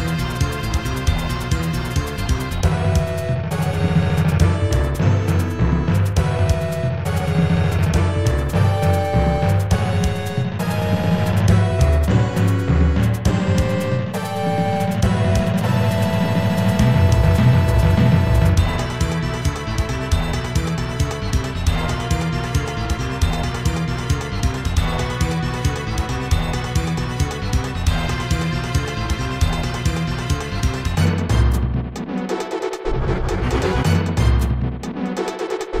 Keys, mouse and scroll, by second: 1.3 shift+z, 7.0 scroll up 1, 11.6 click, 20.2 ctrl+z, 27.1 right click, 29.1 right click, 29.9 scroll down 2, 30.5 middle click, 30.8-31.4 scroll up 2.